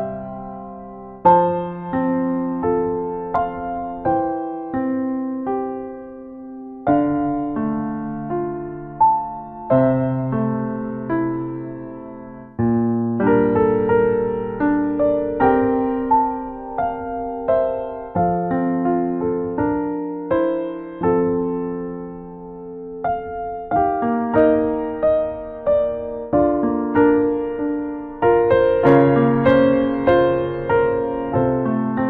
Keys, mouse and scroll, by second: 0.6 f, 0.9 click, 2.7 f, 3.1 click, 5.3 click, 5.6 right click, 6.1 shift+click, 6.9 click, 7.5 ctrl+right click, 7.9 shift+right click, 8.4 right click, 8.8 click, 9.4 click, 9.9 click, 12.5 click, 12.6 ctrl+middle click, 13.1 ctrl+middle click, 13.7 shift+middle click, 14.0 middle click, 14.4 ctrl+middle click, 14.9 shift+middle click, 15.9 right click, 16.9 ctrl+right click, 17.2 f, 17.6 click, 18.1 f, 18.4 click, 20.3 middle click, 20.9 ctrl+right click, 21.3 right click, 21.9 click, 23.9 click, 24.8 click, 25.9 click, 27.3 middle click, 28.1 click, 29.2 middle click, 30.1 right click, 30.5 middle click, 30.9 shift+middle click, 31.4 shift+b, 31.9 middle click.